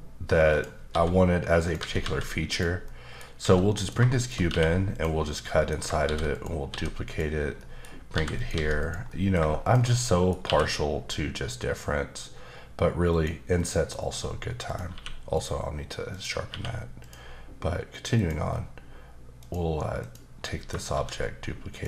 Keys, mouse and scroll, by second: 0.5 click, 0.9 s, 1.6 click, 1.8 s, 2.5 click, 2.8 middle click, 3.4 s, 3.7 click, 4.1 shift+click, 4.5 q, 4.9 click, 5.3 middle click, 6.0 shift+d, 6.3 click, 6.7 s, 7.0 click, 7.5 middle click, 8.1 g, 8.4 click, 8.5 s, 8.8 click, 9.1 middle click, 9.6 click, 9.9 middle click, 10.4 q, 13.1 click, 13.5 middle click, 14.0-14.6 scroll up 3, 14.6 click, 14.9 q, 16.1 click, 16.5 q, 17.0 click, 18.2 click, 18.5-19.4 scroll down 1, 19.4 click, 20.0 click, 20.9 shift+d, 21.7 click.